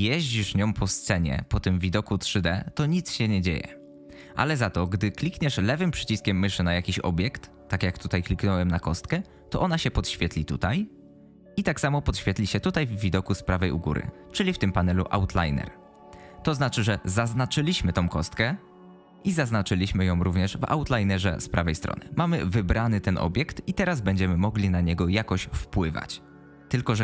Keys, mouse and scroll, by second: 5.7 click.